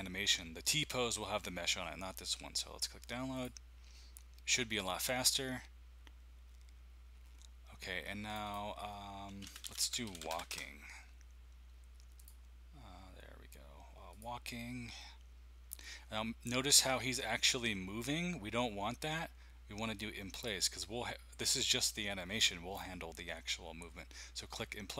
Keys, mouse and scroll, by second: 3.3 click, 8.3 click, 9.1-11.3 typing, 13.5-15.5 typing, 20.3 click.